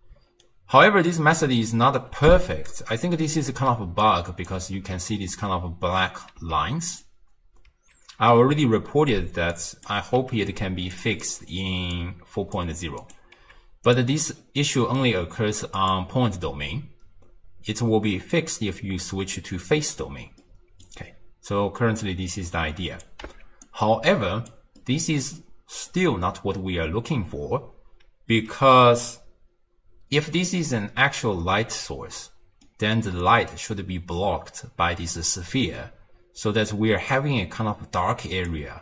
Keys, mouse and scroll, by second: 0.1 d, 0.5-2.0 right drag, 2.0 d, 2.2 d, 2.5 middle click, 3.4-4.1 scroll down 2, 4.1 click, 4.8 ctrl+x, 6.4 z, 8.0 ctrl+x, 9.6 click, 10.2 g, 11.3 click, 12.0 click, 13.0 click, 13.4 g, 14.4-14.8 scroll up 1, 14.8-15.8 middle drag, 15.8-18.9 drag, 19.4-21.0 middle drag, 21.0-21.8 scroll down 1, 21.8-22.5 middle drag, 22.5 drag, 23.3 x, 23.7 click, 24.8-26.9 middle drag, 26.9-30.0 scroll up 1, 32.2-32.7 scroll up 1, 32.7-35.7 middle drag, 36.4-37.1 d, 37.1-38.6 drag, 38.6 d, 38.6 d.